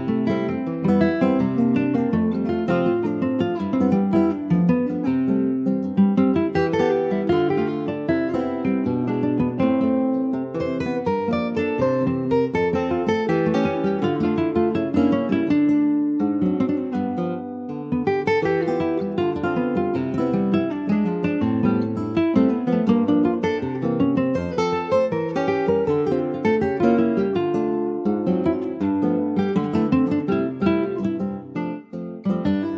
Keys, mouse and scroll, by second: 0.8 ctrl+b, 5.5 Tab, 5.6 click, 5.9 scroll down 3, 6.2 middle click, 6.3 ctrl+scroll up 1, 6.6 ctrl+s, 6.6 scroll down 2, 6.9 middle click, 7.2 scroll up 1, 7.3 ctrl+s, 7.6 middle click, 8.0-8.4 shift+scroll down 1, 8.4 middle click, 8.8 ctrl+s, 8.9 ctrl+click, 9.1 shift+middle click, 9.7 ctrl+s, 9.9 click, 10.2 shift+a, 19.4 alt+middle click, 19.8 alt+middle click, 21.0 ctrl+s, 21.1-21.6 scroll up 3, 21.6-23.0 shift+middle drag, 23.0-25.2 drag, 25.4 click, 25.8 r, 28.2 ctrl+s, 28.9 scroll down 3, 29.3 alt+middle click, 29.7-30.1 scroll up 2, 30.1 shift+middle click, 30.7 click, 31.6 alt+z, 31.8 scroll up 3, 32.1 shift+middle click.